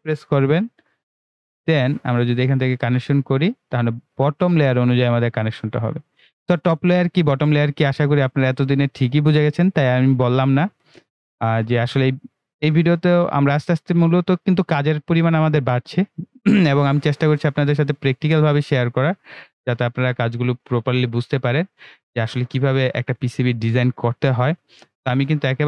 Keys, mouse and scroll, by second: 0.4 ctrl+w, 2.2 click, 6.6 click, 8.4-10.1 right drag, 10.1 click, 13.4-14.6 scroll down 2, 16.2-23.2 ctrl+right drag.